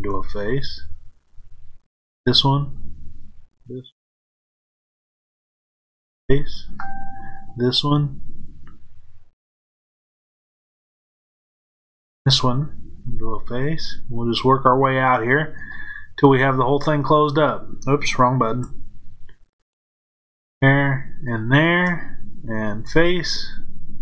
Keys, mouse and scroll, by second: 1.9 click, 3.4 shift+click, 4.7 shift+click, 6.0 f, 7.3 click, 10.1 shift+click, 11.7 shift+click, 13.0 f, 15.5 click, 16.4 z, 19.7 shift+click, 21.2 shift+click, 22.7 f.